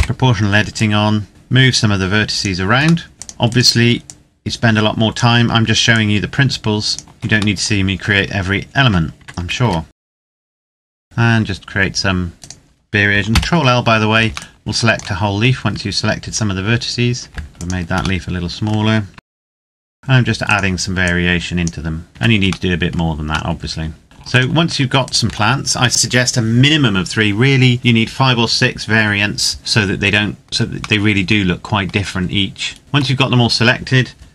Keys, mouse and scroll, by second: 0.4 click, 2.8 middle click, 3.1 click, 3.2 right click, 3.8 click, 7.0 scroll up 2, 7.3 shift+middle click, 8.0 scroll up 1, 8.6 Tab, 9.3 a, 9.9 c, 10.0 click, 10.1 shift+middle click, 10.2 a, 10.3 c, 10.4 right click, 10.4 click, 10.6 scroll down 1, 10.6 click, 10.8 Tab, 10.8 middle click, 11.0 right click, 11.0 Tab, 12.1 right click, 13.0 ctrl+l, 14.1 shift+click, 14.4 shift+middle click, 15.0-16.0 scroll up 1, 16.0 s, 17.4 Escape, 17.5 click, 18.1 middle click, 19.0-19.8 typing, 19.2 click, 19.6 click, 19.7 right click, 19.8 click, 19.9 scroll down 1, 20.2 right click, 20.7 click, 22.0 right click, 22.1 Tab, 22.4 middle click, 24.0 shift+right click, 29.6 middle click, 31.1 middle click, 31.6 Tab.